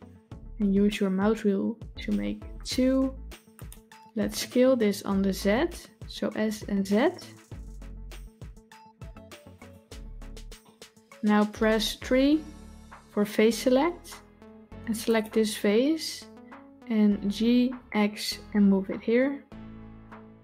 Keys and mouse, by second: 6.2 s, 10.5 middle click, 12.9 3, 14.9 click, 17.1 g.